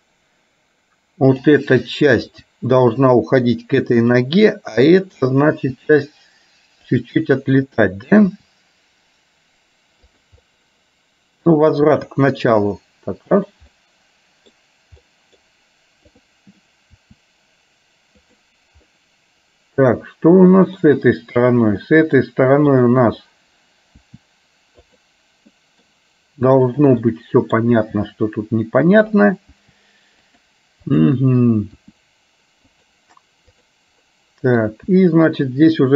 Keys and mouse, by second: 1.4 click, 2.4 r, 4.9 click, 5.9 r, 8.4 r, 10.6 middle click, 12.1 r, 13.9 middle click, 15.1 middle click, 17.3 r, 19.0-20.9 middle drag, 21.4 click, 22.0 middle click, 22.8 click, 24.1 r, 25.6 middle click, 26.8 click, 27.3 middle click, 28.0 r, 29.8 r, 31.0 click, 33.6 click, 34.1 middle click, 35.1 r.